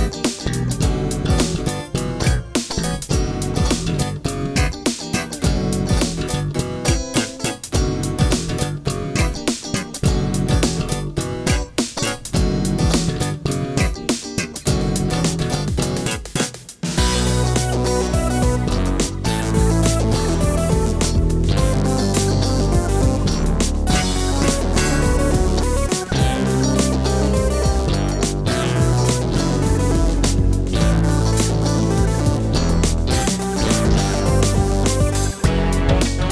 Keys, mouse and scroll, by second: 0.9 ctrl+KP_3, 1.0-2.7 typing, 2.0 click, 4.2 g, 5.1 click, 6.1-7.3 typing, 6.8 ctrl+s, 7.5 click, 8.3 click, 9.1 click, 10.0 a, 10.7 ctrl+r, 10.9 ctrl+r, 11.2 ctrl+r, 12.6 a, 12.7 a, 16.1 middle click, 16.6 middle click, 16.7 click, 16.8 KP_1, 17.7 a, 17.8 a, 18.0 a, 18.0 click, 20.4 u, 20.8 r, 21.1 s, 32.8-34.0 typing, 34.3 click.